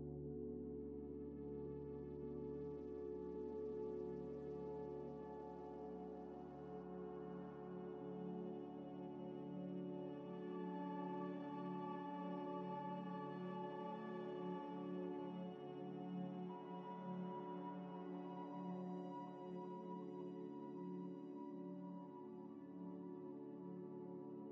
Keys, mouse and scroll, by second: 2.9 g, 3.1 y, 3.7 ctrl+z, 4.2 g, 4.3 y, 4.8 ctrl+z, 4.9 ctrl+z, 5.4 Tab, 5.7 Tab, 6.0 Tab, 6.4 s, 7.2 ctrl+z, 7.6 ctrl+z, 7.7 ctrl+z, 7.8 ctrl+z, 7.9 ctrl+z, 8.0 ctrl+z, 8.1 ctrl+z, 9.2 Tab, 9.5 scroll down 1, 9.8 ctrl+a, 10.8 Tab, 11.1 1, 11.6 ctrl+b, 15.6 ctrl+b, 17.5 scroll down 1, 18.2 Tab, 18.6 middle click, 19.3 s, 19.5 x, 21.8 scroll up 1, 22.3 scroll up 1, 22.3 scroll down 1, 22.9 shift+a, 23.8 s.